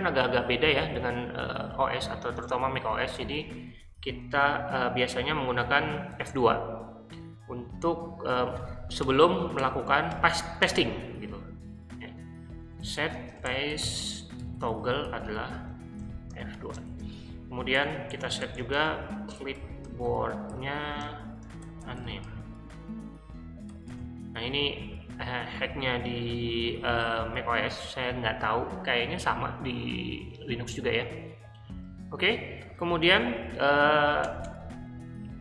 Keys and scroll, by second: 6.1 F2, 9.1 BackSpace, 9.5 BackSpace, 10.1 BackSpace, 12.3-24.2 typing, 17.7 Return, 34.2 Return, 34.4 Return, 35.2-35.4 typing.